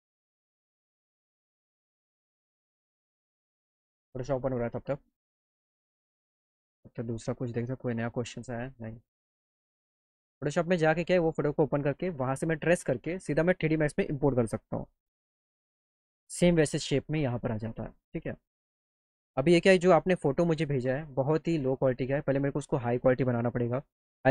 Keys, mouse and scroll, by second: 6.1 click, 6.7 click, 10.6 click, 19.4 click, 20.3 click, 22.4 click.